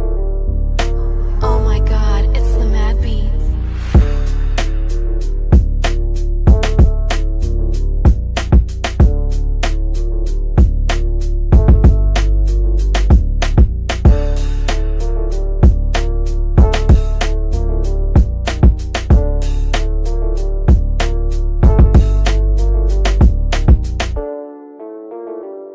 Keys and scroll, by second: 1.0 Delete, 8.8 shift+F2, 9.4 Escape.